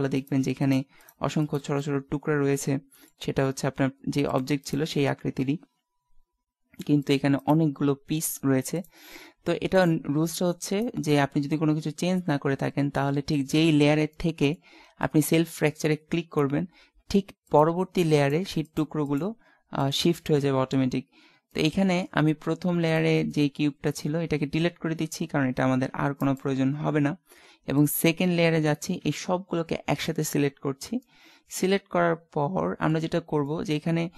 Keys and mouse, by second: 0.2 right click, 1.7-3.2 middle drag, 4.3-5.7 drag, 4.7-5.7 right drag, 7.1 click, 7.5-8.5 right drag, 8.5 g, 9.8 click, 11.6 right click, 14.2-15.5 middle drag, 17.6 click, 18.2-19.4 right drag, 23.1 click, 23.2 middle click, 23.9 click, 23.9 right click, 24.8 x, 28.0-29.4 drag, 29.0 a, 31.0-33.2 middle drag.